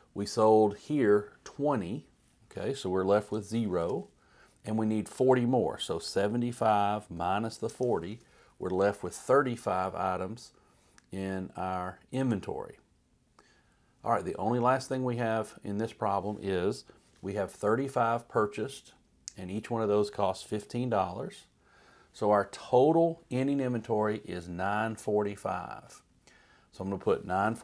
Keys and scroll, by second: 3.3 typing, 4.0 Page_Up, 5.8-8.2 typing, 17.5 3, 17.9 5, 18.5 Right, 20.3-21.1 typing, 21.2 Right.